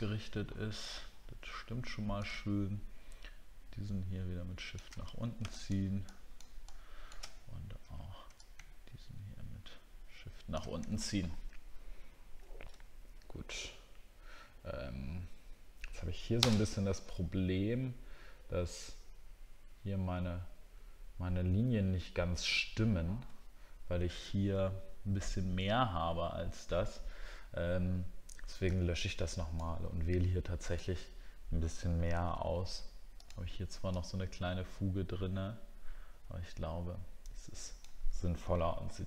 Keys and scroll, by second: 10.9 alt+scroll down 1, 11.6-12.2 alt+scroll down 2, 12.8 alt+scroll down 1, 22.5 alt+scroll up 1, 38.5 ctrl+d.